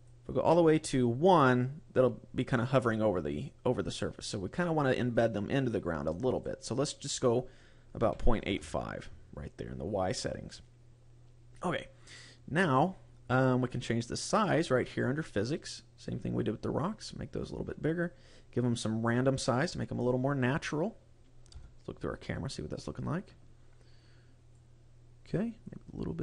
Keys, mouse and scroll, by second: 0.5 click, 4.7 click, 6.5 click, 10.7-13.3 scroll up 5, 15.6 click, 18.5 click, 19.7-20.2 scroll down 5, 20.7-21.4 scroll down 1, 21.4 KP_0, 22.5 scroll up 1, 24.4 click, 25.5 click.